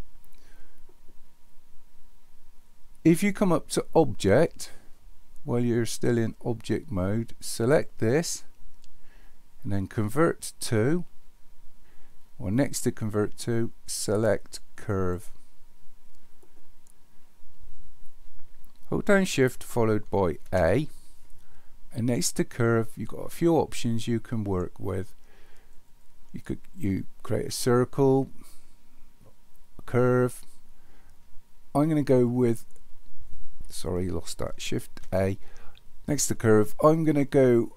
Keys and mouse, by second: 7.6-15.1 drag, 20.4 shift+a, 35.0 shift+a.